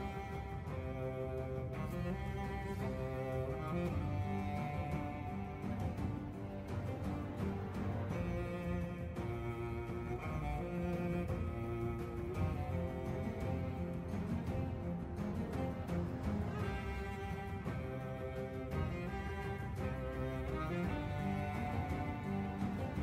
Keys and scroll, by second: 1.0 Delete, 1.7 shift+a, 1.8 Tab, 7.6 Tab, 7.9 Tab, 8.5 f, 9.5 e, 11.0-13.2 typing, 14.3 g, 15.5-19.3 typing, 20.7 Tab, 21.6 shift+d, 21.7 Escape.